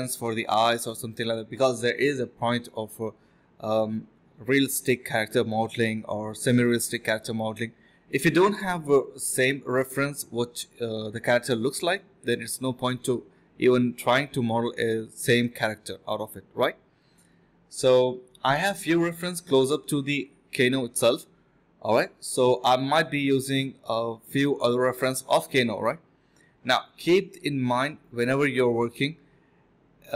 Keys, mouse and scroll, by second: 1.6 ctrl+b, 1.9 double click, 2.0-2.7 typing, 4.2 typing, 5.7-6.1 typing, 9.7 typing, 10.7 double click, 11.5 alt+click, 11.6 alt+double click, 11.8 alt+click, 12.8 alt+click, 13.7 1, 14.8 alt+click, 17.6 space, 18.1 alt+click, 18.4 alt+click, 18.9-20.5 typing, 20.8 alt+click, 21.8 alt+click, 22.5-22.9 typing, 24.4 typing, 26.3-27.3 typing, 26.8 alt+click.